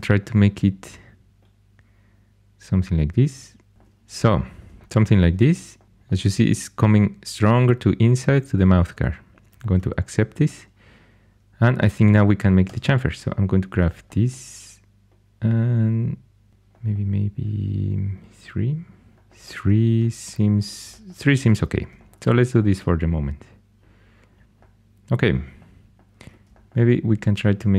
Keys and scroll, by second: 12.6 2, 19.1 3.